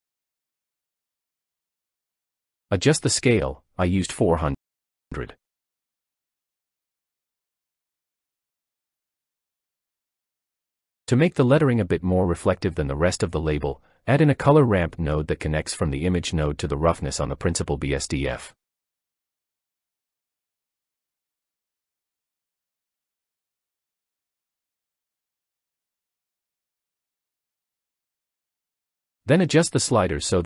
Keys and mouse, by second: 2.3 shift+click, 2.4 shift+middle click, 5.9 0, 9.2 middle click, 10.7 shift+drag, 13.9-14.7 drag, 16.0-16.4 drag, 16.9-19.1 drag, 20.4 click, 21.7 click, 29.8-30.4 drag.